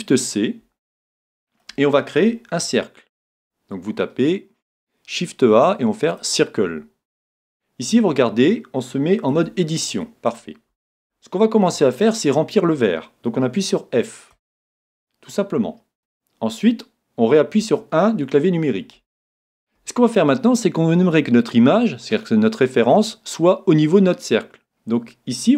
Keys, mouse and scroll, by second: 1.1-2.9 middle drag, 2.6 shift+a, 7.4-9.3 middle drag, 9.4 Tab, 9.8-10.6 scroll up 1, 10.6-12.9 middle drag, 14.3 f, 17.6 KP_1, 19.0-21.0 middle drag, 25.4 middle click.